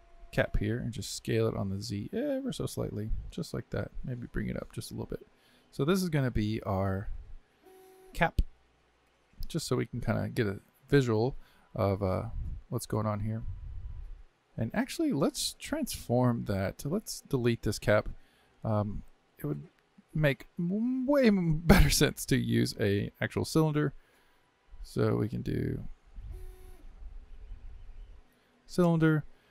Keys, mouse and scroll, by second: 7.0 click, 7.2-10.3 drag, 13.3-14.6 middle drag, 19.3-25.5 right drag.